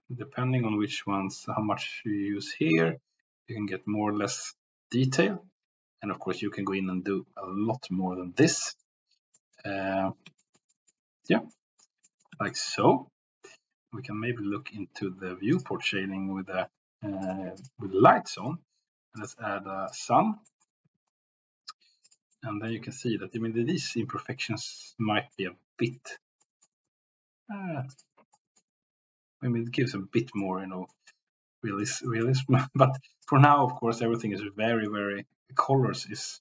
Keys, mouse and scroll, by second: 8.8 middle click, 9.4 shift+middle click, 10.3-10.7 shift+middle drag, 10.8 middle click, 11.5 middle click, 12.0-12.3 middle drag, 12.8-13.6 middle drag, 17.6 click, 18.4-20.0 drag, 20.7 middle click, 20.9 r, 22.0 drag, 22.5 middle click, 23.2 middle drag, 24.5-25.0 middle drag, 25.5-26.0 middle drag, 26.4 middle click, 26.9 r, 28.0 drag, 28.4 middle click, 30.4-31.0 middle drag, 32.1 middle drag, 33.2 click, 33.5 middle click, 34.6 middle click, 36.3-36.4 drag.